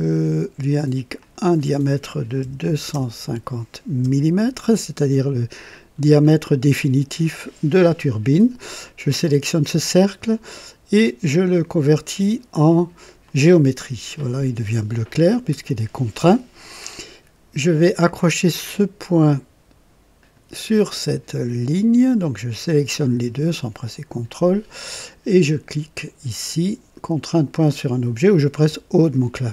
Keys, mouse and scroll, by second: 0.1 click, 1.2 click, 2.4 KP_2, 2.8 KP_5, 2.9 KP_0, 4.0 KP_Enter, 5.9 scroll up 2, 6.4-7.5 right drag, 9.2 click, 13.2 click, 20.1 click, 22.4 click, 28.5 o.